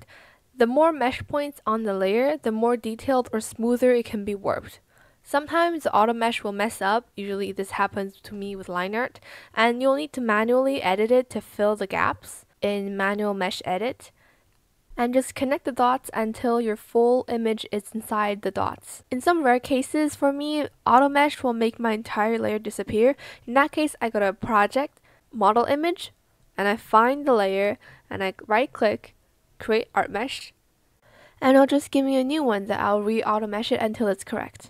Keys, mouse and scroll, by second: 0.1 click, 1.5 ctrl+z, 3.7 z, 4.9 ctrl+z, 5.9 ctrl+z, 9.5 ctrl+z.